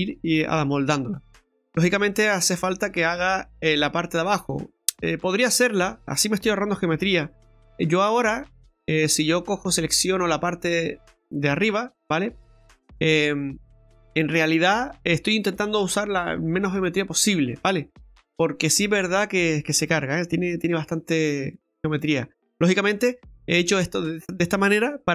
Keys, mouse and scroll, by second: 4.3 middle click, 7.4 Tab, 7.7 middle click, 9.8 right click.